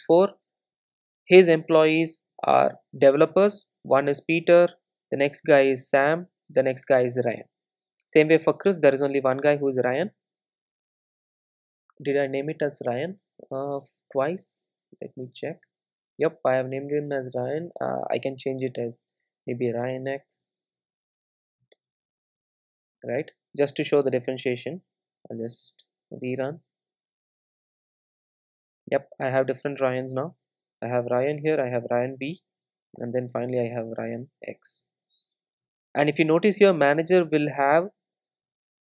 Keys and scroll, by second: 25.0 super+r.